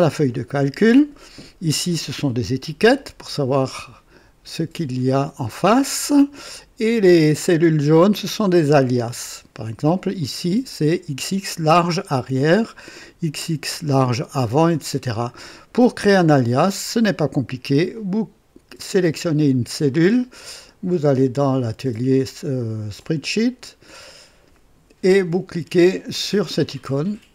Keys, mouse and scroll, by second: 10.1 click, 12.9 click, 17.9 click, 20.6 click, 22.9 click, 26.6 click.